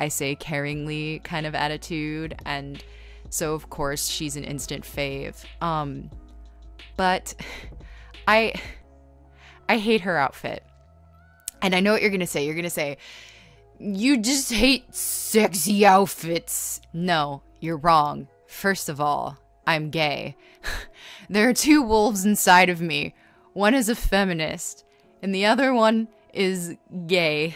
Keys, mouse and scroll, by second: 3.1 space, 6.9-7.9 typing, 8.9-12.1 typing, 13.1-14.1 typing, 15.7-17.1 typing, 18.6 ctrl+z, 20.4 ctrl+z, 22.1 space, 22.6 ctrl+z, 23.3-24.3 typing, 25.8-27.2 typing.